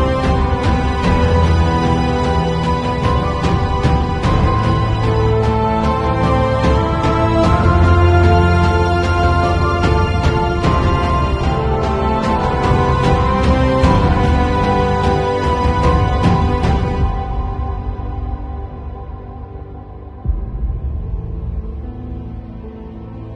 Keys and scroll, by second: 11.2 b, 12.5 x, 14.1 0, 16.1 ].